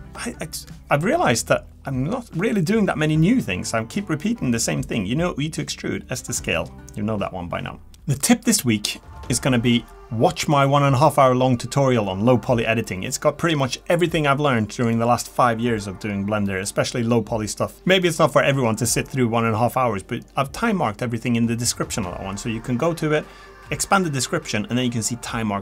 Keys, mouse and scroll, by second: 18.1 s, 18.5 click, 18.6 middle click, 18.7 e, 19.2 middle click, 19.2 l, 20.6 click, 20.6-25.6 typing, 20.7 middle click, 20.8 middle click, 20.8 click, 21.0 middle click, 21.0 click, 22.2 click, 22.4 click, 23.1 click, 23.6 click, 23.7 middle click, 24.0 middle click, 24.4 click, 24.4 ctrl+z, 24.4 shift+middle click, 24.5 click, 24.5 middle click, 25.0 click, 25.1 click.